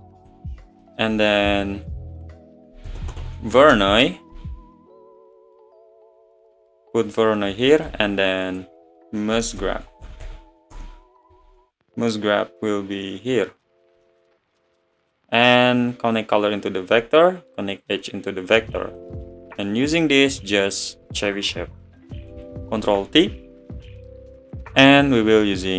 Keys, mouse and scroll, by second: 15.8-18.8 drag, 21.3-22.8 drag, 22.8 ctrl+t, 24.7-25.7 middle drag.